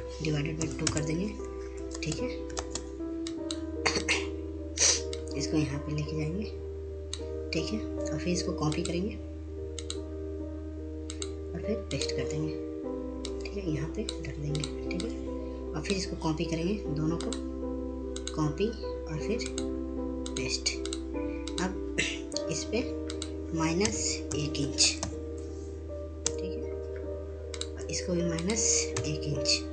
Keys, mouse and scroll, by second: 2.9 space, 3.9-19.6 drag, 25.0-25.9 typing, 26.7 Return, 28.0 click.